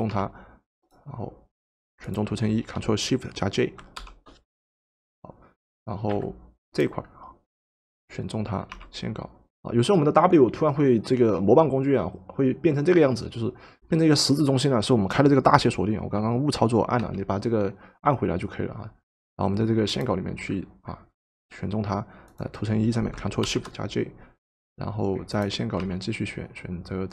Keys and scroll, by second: 0.1 w, 2.7 shift+Caps_Lock, 6.1 ctrl+shift+v, 8.7 w, 9.5 w, 17.0 Caps_Lock, 25.8 ctrl+shift+w.